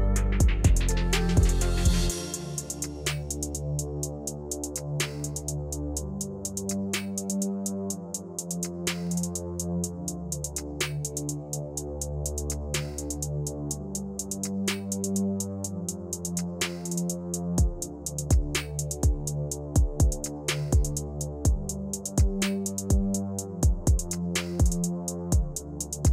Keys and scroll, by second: 6.0 p.